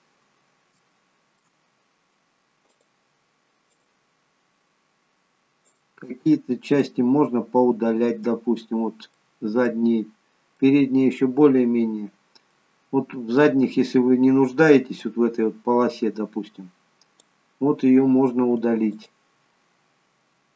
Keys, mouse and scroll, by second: 0.9 shift+middle click, 2.7 click, 3.8 click, 9.2 middle click, 10.6 middle click, 15.1 click, 18.9 ctrl+click.